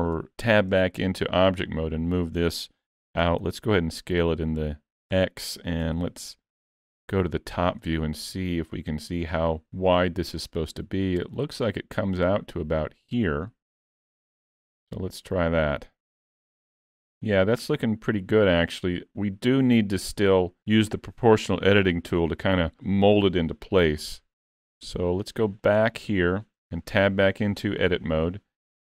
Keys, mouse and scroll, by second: 1.7 middle click, 3.2 s, 5.9 KP_7, 6.8 z, 8.1-8.5 scroll up 3, 8.5 shift+middle click, 10.4 click, 14.7 z, 15.9 middle click, 19.8 middle click, 23.8 KP_3, 24.9 z, 26.4-26.7 scroll up 4, 26.7 shift+middle click, 27.3 Tab, 27.7 shift+middle click.